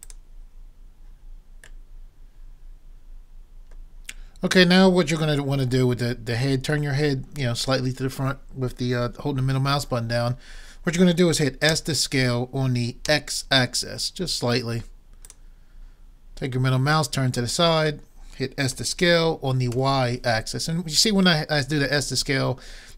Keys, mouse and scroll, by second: 1.8 middle click, 7.9 middle click, 11.7 s, 16.7-18.6 middle drag, 18.8 s.